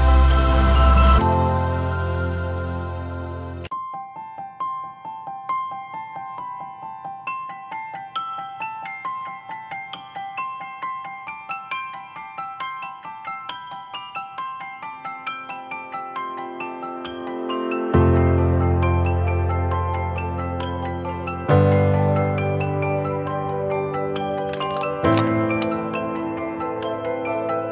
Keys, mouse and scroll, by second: 2.7 typing, 3.8-4.6 typing.